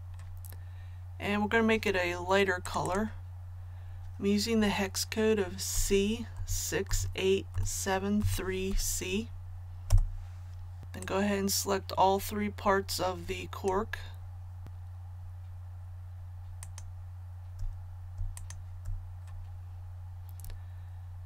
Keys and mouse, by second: 5.7-8.7 typing, 10.8-14.0 drag, 16.6 shift+click, 18.3 shift+click.